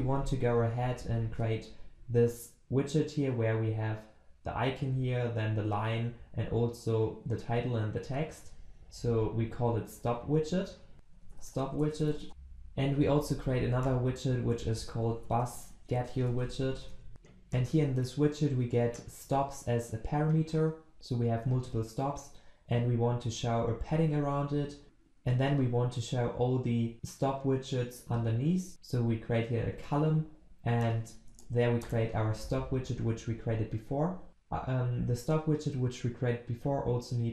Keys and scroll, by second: 17.1 ctrl+s, 24.8 alt+Return, 31.3 alt+Return, 34.3 ctrl+alt+Left.